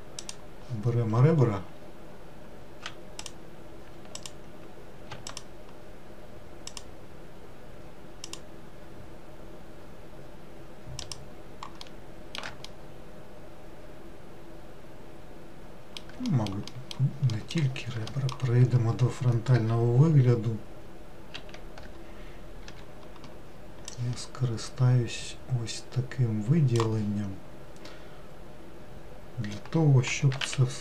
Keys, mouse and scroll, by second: 0.2-1.8 drag, 1.8-3.2 scroll up 1, 3.2 click, 4.2 alt+click, 5.3 alt+shift+click, 6.7 alt+shift+click, 8.2 alt+shift+click, 11.0 alt+shift+click, 11.8 alt+shift+middle click, 12.7-15.8 middle drag, 16.3 alt+middle click, 17.3 alt+middle click, 18.1 alt+middle click, 21.4 alt+z, 22.7 1, 23.9 click, 30.1 g.